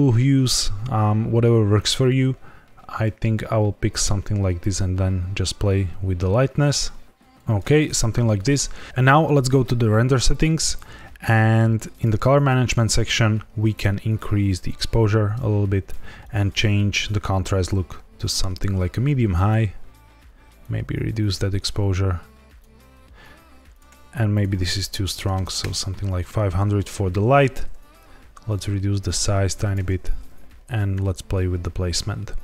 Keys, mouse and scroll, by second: 8.9 click, 10.2 click, 10.9-11.9 scroll down 3, 11.9 click, 12.2 scroll down 1, 13.6 click, 16.1 click, 20.5 click, 24.2 click, 25.3 KP_0, 27.9 click, 30.0 g, 30.1 z.